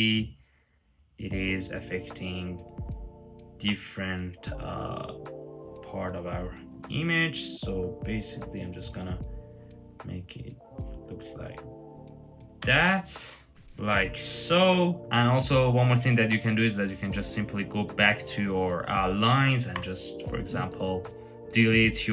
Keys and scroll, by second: 6.6 super+z, 12.4 Return, 15.0 Return, 15.0 typing, 19.3-20.0 typing.